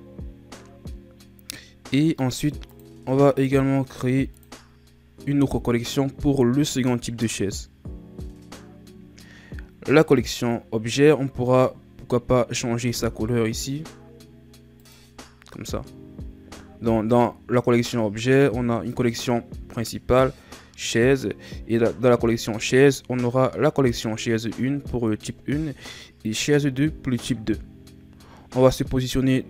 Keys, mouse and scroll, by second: 2.7 click, 3.3-6.4 right drag, 10.2 click, 11.4-14.6 right drag.